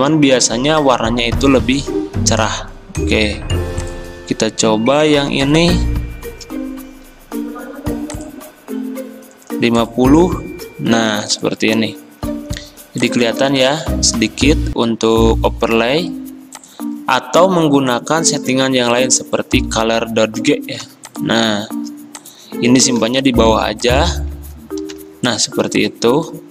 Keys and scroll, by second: 0.1 ctrl+z, 11.2 v, 13.6 ctrl+z, 20.9 v, 23.0 ctrl+x, 24.8 ctrl+f.